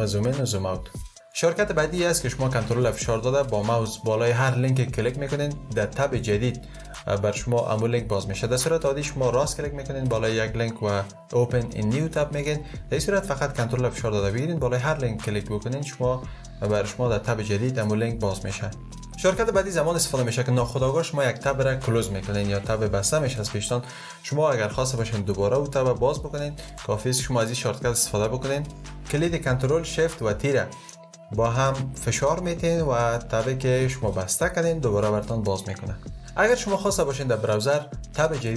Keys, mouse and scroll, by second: 29.9 ctrl+shift+t.